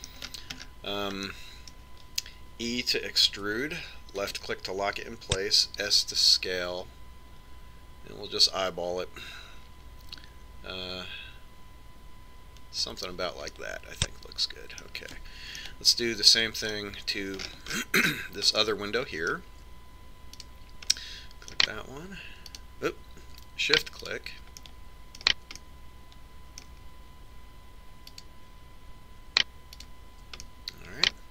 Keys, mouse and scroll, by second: 0.4-4.5 middle drag, 4.3 e, 6.9 s, 14.7-16.6 middle drag, 16.7 middle click, 18.6-19.8 middle drag, 20.2-21.4 middle drag, 21.5-23.2 right drag, 22.1 click, 22.5-23.9 middle drag, 23.7-27.0 right drag, 25.8-28.7 middle drag, 29.3-31.3 right drag.